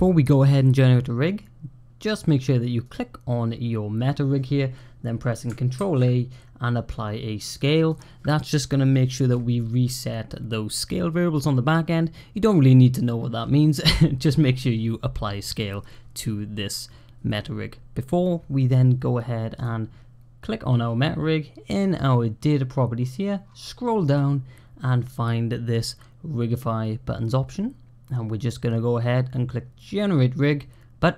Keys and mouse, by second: 2.7 click, 5.6 ctrl+a, 7.7 click, 19.4 click.